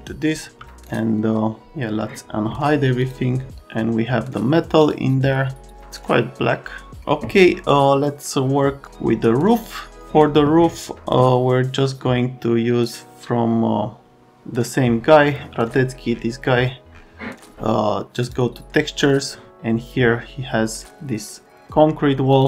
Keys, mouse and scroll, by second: 0.6 click, 0.9 right click, 3.0 click, 4.8 click.